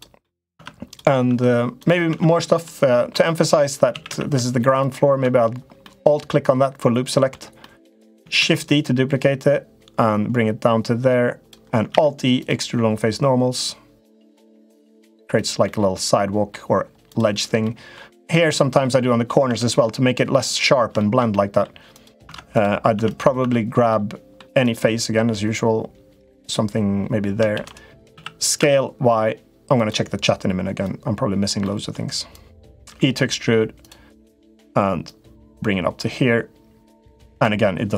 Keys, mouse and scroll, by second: 0.1 middle click, 0.3 Tab, 1.1 Tab, 1.9 Tab, 2.1 click, 2.5 middle click, 3.7 a, 3.9 a, 4.5 shift+click, 5.6-7.0 middle drag, 7.3 middle click, 8.1 shift+d, 9.2-11.3 drag, 11.7 alt+e, 15.5 middle click, 16.8 click, 17.4 middle click, 18.0 click, 18.6 middle click, 19.2 Tab, 19.6 middle click, 20.7 middle click, 21.1 middle click, 22.0 Tab, 22.3 click, 22.7 Tab, 22.9 click, 23.2 Tab, 23.6 middle click, 24.4 click, 25.1-26.1 middle drag, 27.3 shift+d, 27.9 s, 30.6 click, 31.4 middle click, 32.1 click, 32.6 e, 34.9-37.2 drag.